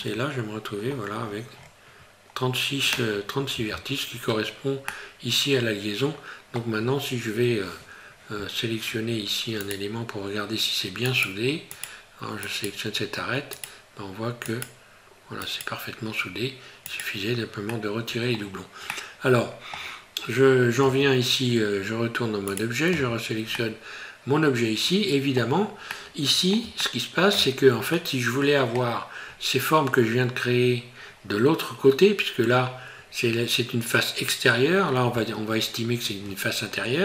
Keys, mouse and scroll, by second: 0.8-1.4 scroll down 9, 1.3 scroll up 1, 1.6 scroll down 2, 4.9 middle click, 6.8 scroll up 4, 9.6 right click, 11.1 right click, 12.5 right click, 14.5 right click, 15.5 right click, 17.7 middle click, 18.4-18.9 scroll down 4, 18.9 middle click, 20.8 Tab, 22.5 right click, 22.9 Tab, 23.6 middle click, 25.9 middle click, 26.8 shift+middle click, 27.0 shift+middle click, 28.0 middle click, 29.3 scroll up 2.